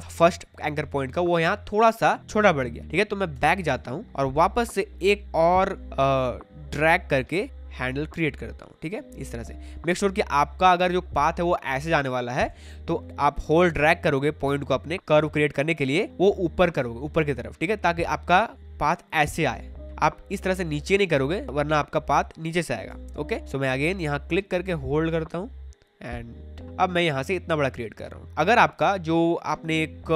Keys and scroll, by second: 3.3 BackSpace, 12.5 ctrl+z, 19.9 ctrl+z, 22.9 ctrl+z.